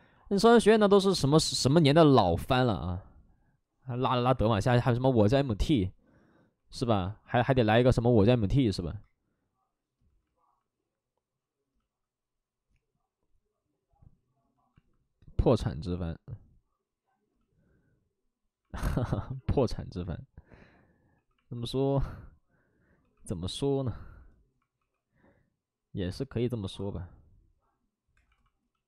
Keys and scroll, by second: 6.9 space, 8.6 w, 19.3 alt+f, 21.1 2, 22.9 2, 24.7 w, 28.1 2.